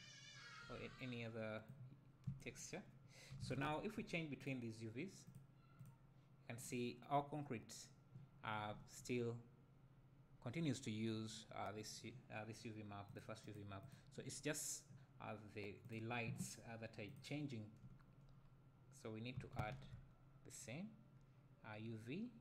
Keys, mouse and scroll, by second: 4.4 click, 5.2 click, 5.8 click, 13.1 click, 13.4-13.9 drag, 17.0 click.